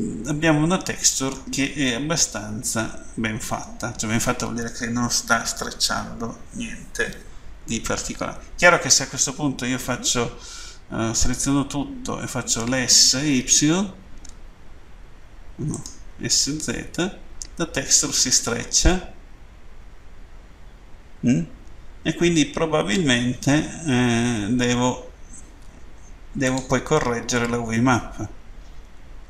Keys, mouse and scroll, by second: 1.8 middle click, 11.6 Tab, 12.6 s, 13.3 y, 15.6 right click, 16.6-17.1 typing, 26.3 click, 27.3-27.8 scroll down 2.